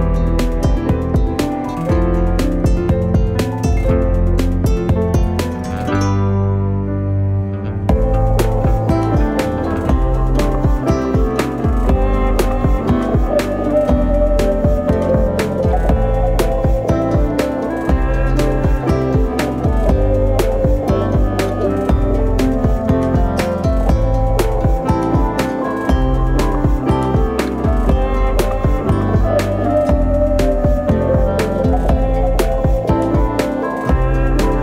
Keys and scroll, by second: 4.3 space, 4.7 space, 12.4 g, 19.2 v, 21.6 8, 26.2 g.